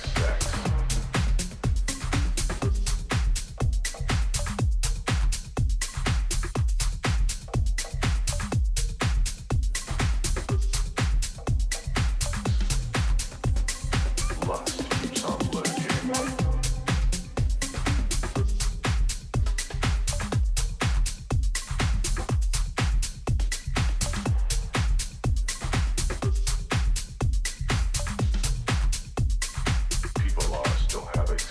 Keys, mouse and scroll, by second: 1.8 b, 10.6 g, 13.6 a, 14.9 b, 16.3 g, 24.2 a, 26.6 b, 28.3 g.